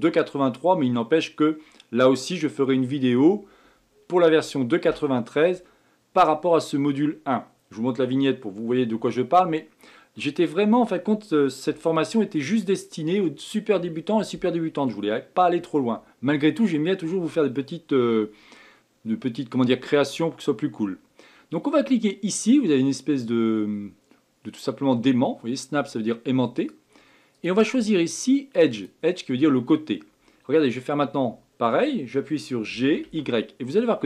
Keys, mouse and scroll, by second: 26.6 click, 27.3-30.5 drag.